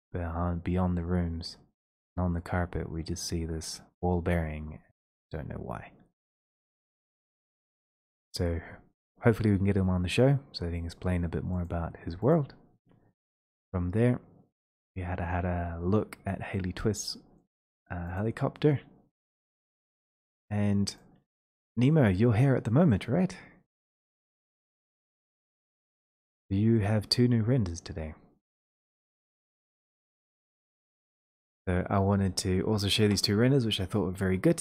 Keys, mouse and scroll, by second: 1.5-2.7 scroll, 2.9-5.6 scroll, 5.6-6.0 scroll, 6.9 middle click, 7.1-8.3 scroll, 9.3-9.7 scroll, 11.7 click, 12.3 click, 18.1 click, 21.5 shift+click, 24.2 click, 25.2 click, 25.4 shift+click, 25.4 scroll up 1, 26.4-27.2 scroll, 29.2 click, 32.2-34.6 drag.